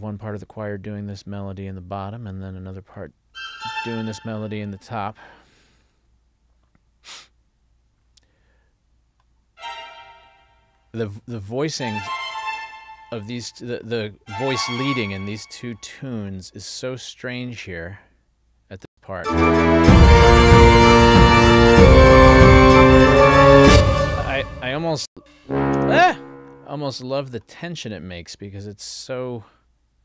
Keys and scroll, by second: 18.9 space, 23.7 space, 25.9 space.